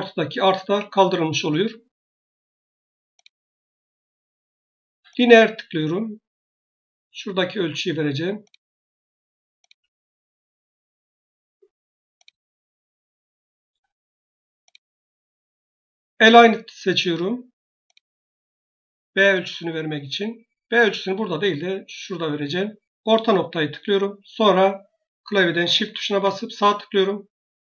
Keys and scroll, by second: 0.5 Escape.